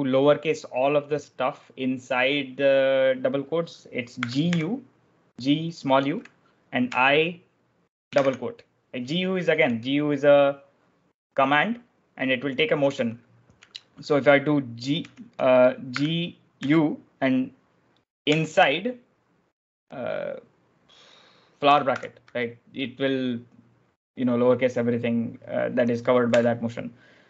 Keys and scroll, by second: 3.8-4.8 typing, 6.8 i, 9.5-10.3 typing, 14.6-16.5 typing, 17.9-18.6 typing, 21.8 shift+b, 26.1 u.